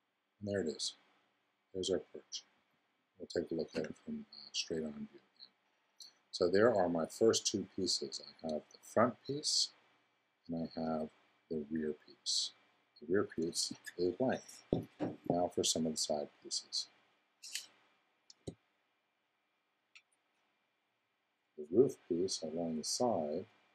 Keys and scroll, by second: 3.7 0.